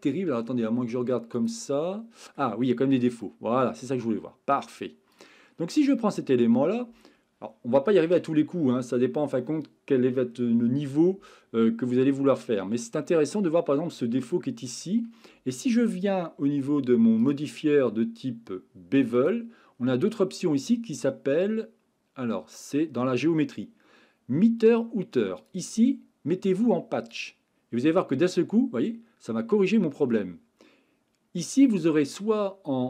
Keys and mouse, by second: 1.4 click, 1.9-2.3 middle drag, 2.7-3.0 shift+middle drag, 3.2-3.7 middle drag, 6.0-6.4 shift+middle drag, 14.2-14.8 shift+middle drag, 19.2 click, 25.4-27.3 drag.